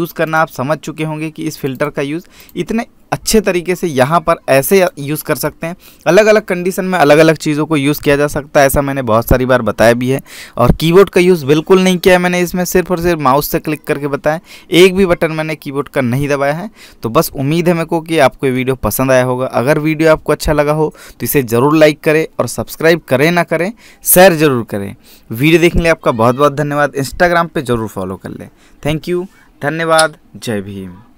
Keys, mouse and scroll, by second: 1.1 click, 5.7 click, 6.8 scroll up 1.